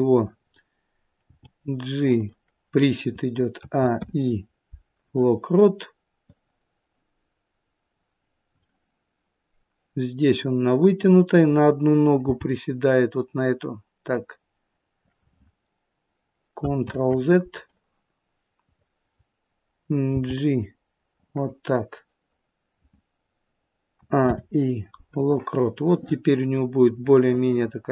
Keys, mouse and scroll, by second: 1.1 g, 3.5 a, 3.9 i, 6.3 click, 10.8 click, 12.2 g, 16.8 ctrl+z, 18.5 click, 20.0 g, 23.9 a, 24.1 i, 26.5 click.